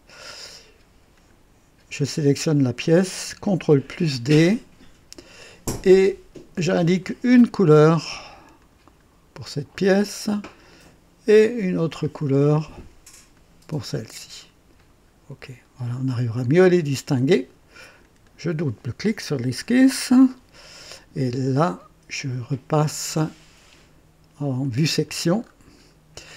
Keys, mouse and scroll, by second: 1.1 click, 3.8 ctrl+d, 5.1 click, 7.0 click, 8.6 click, 10.6 click, 11.7 click, 13.3 click, 14.7 click, 15.8 click, 16.4 click, 18.0 click, 19.5-19.9 scroll up 1, 20.3-21.0 right drag, 24.6 click, 25.4-26.0 scroll up 2.